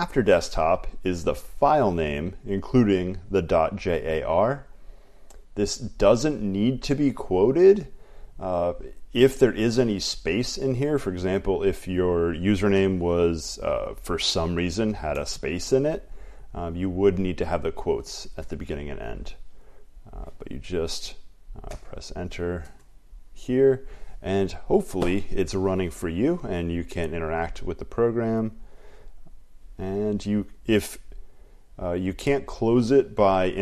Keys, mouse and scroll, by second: 0.6 click, 2.9 click, 6.2 click, 11.8 click, 12.9-14.8 Left, 15.0 Left, 16.5 Left, 18.3 Right, 18.6-33.6 typing, 20.3 click, 21.8 Return, 22.8 Return.